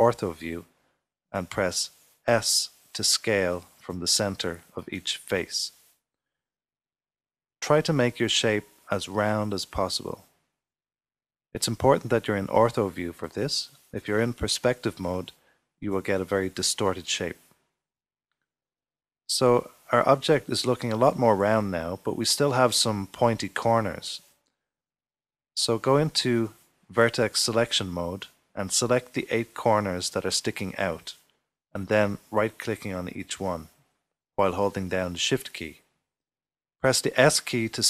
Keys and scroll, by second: 5.9 typing, 16.0 typing, 17.4-18.7 typing.